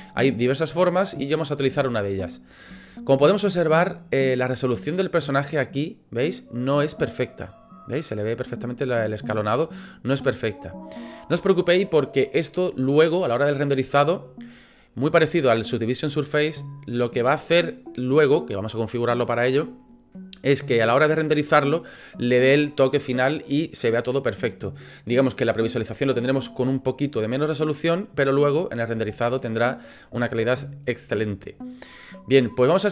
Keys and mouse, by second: 2.7-3.1 shift+middle drag, 3.2-3.7 middle drag, 30.5-31.1 shift+middle drag.